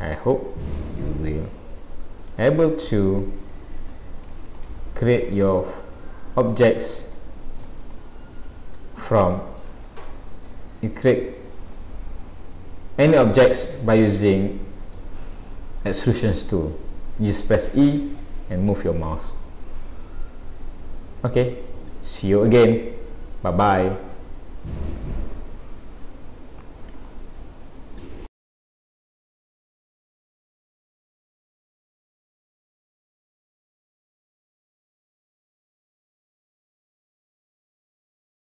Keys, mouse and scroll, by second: 1.8-2.4 scroll up 3, 3.4 Tab, 3.8 click, 4.5 shift+click, 5.3 Delete, 6.0 scroll down 1, 6.7 scroll down 2, 7.1 shift+middle click, 8.0 middle click, 9.9 shift+middle click, 10.7 scroll down 2, 11.8 middle click, 13.5-14.0 scroll up 2, 14.0-14.3 scroll down 1, 14.4 middle click.